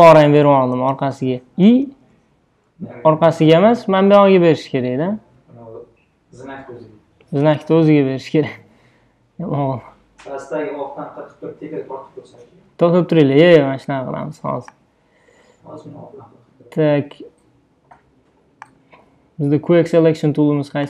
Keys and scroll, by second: 0.6 BackSpace, 2.0 super+z, 7.5 BackSpace.